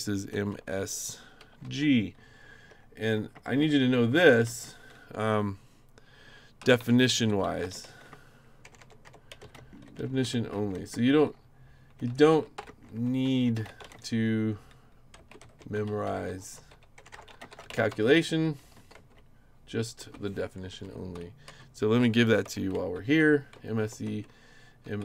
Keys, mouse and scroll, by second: 0.3-4.6 typing, 6.3-19.4 typing, 20.0 Return, 20.7 Down, 21.1 Up, 21.5 Down, 22.4 shift+m, 22.9 shift+e, 23.5 Return, 24.0-25.0 typing.